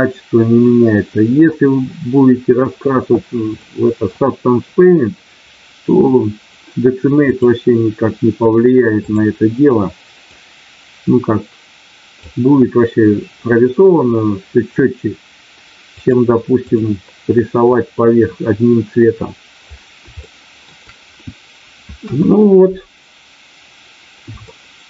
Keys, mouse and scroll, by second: 3.6 middle click, 7.3-9.2 drag, 10.2-12.3 drag, 15.9 click, 20.2 shift+middle click, 21.9 KP_1, 24.4 shift+middle click.